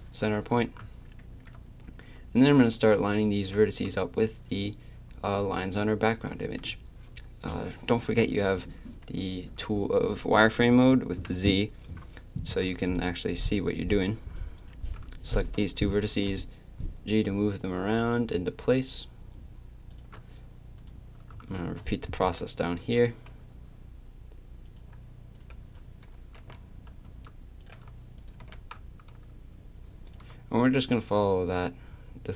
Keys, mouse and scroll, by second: 1.1-3.8 middle drag, 11.3 z, 16.1 g, 21.4 click, 22.2 g, 25.3-27.6 drag, 26.4 g, 28.2-30.1 drag, 28.4 g.